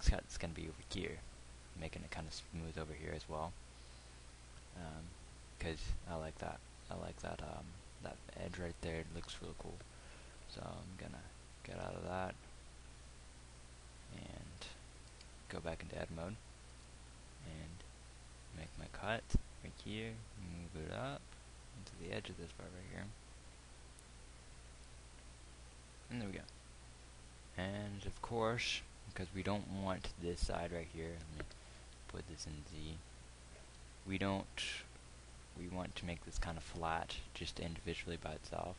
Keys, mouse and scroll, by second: 10.7 z, 12.0 KP_1, 15.5 Tab, 17.1 ctrl+r, 32.1 z.